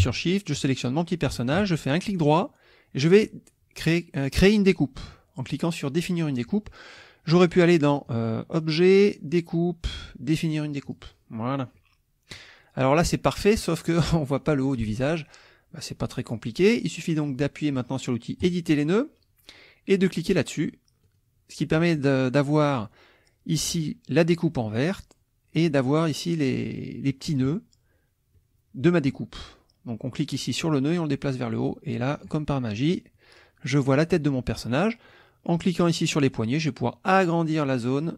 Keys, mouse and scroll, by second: 0.6 shift+click, 2.0 shift+right click, 7.5 click, 8.0 click, 10.8 click, 11.7 click, 18.4 click, 21.1 click, 28.3 click, 30.7-32.4 drag, 35.2-36.8 drag, 38.0-38.1 drag.